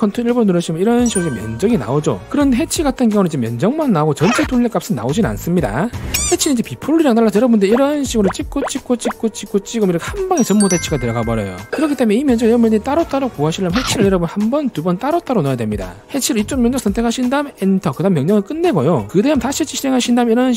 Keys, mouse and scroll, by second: 0.0 click, 7.9 click, 8.4 click, 8.8 click, 9.3 click, 9.6 click, 10.4 right click, 16.0 right click, 17.2 click, 17.8 right click, 20.2 right click.